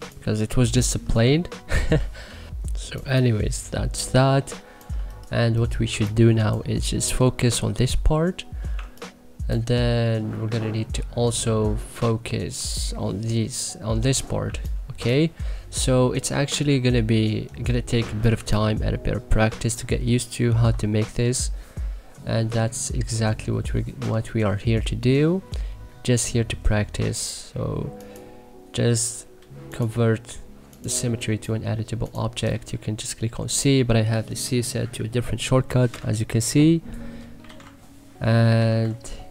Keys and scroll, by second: 1.9 ctrl+z, 2.4 1, 3.0 3, 5.8 1, 14.4 1, 18.0 2, 32.7 Delete, 35.9 c, 37.1-39.3 typing.